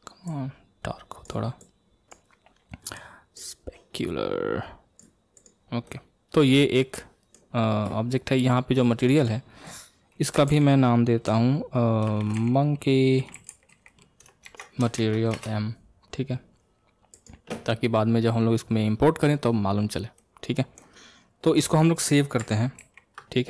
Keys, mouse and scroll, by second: 3.3-5.6 drag, 5.8-8.9 middle drag, 8.9 click, 9.1 click, 17.1 click, 19.8-20.1 scroll down 1, 20.1-22.9 middle drag, 22.9 ctrl+s.